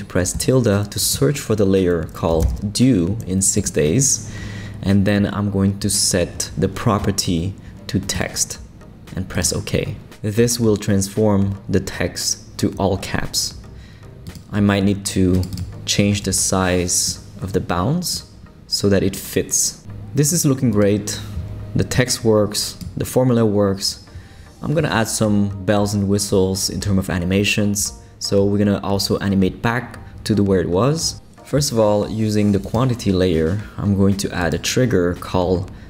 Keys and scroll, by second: 0.3 `, 2.1-3.0 typing, 16.2 Escape.